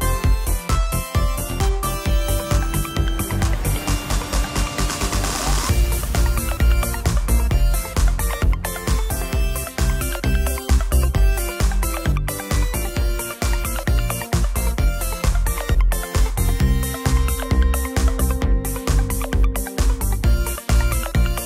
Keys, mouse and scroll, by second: 0.0 shift+z, 8.0 s, 10.7 middle click, 13.1 shift+z, 13.6 shift+z, 15.7 click, 16.6-18.5 typing, 19.8 KP_4, 19.9 KP_5.